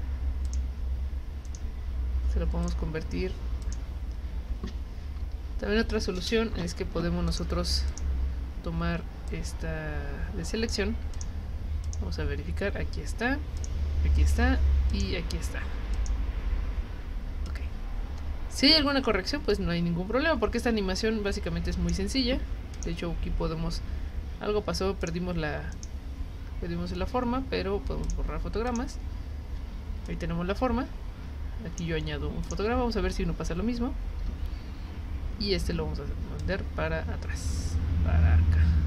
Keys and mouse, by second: 0.5 click, 1.5 right click, 2.6 click, 3.6 click, 7.3 click, 7.9 click, 9.3-10.7 drag, 11.1 click, 11.8 click, 13.6 click, 14.9 click, 15.9 click, 17.5-21.9 drag, 22.7 click, 25.0 click, 28.0 click, 28.7 click, 30.0-31.8 drag, 32.4 click, 34.2 F6, 36.4-38.8 drag.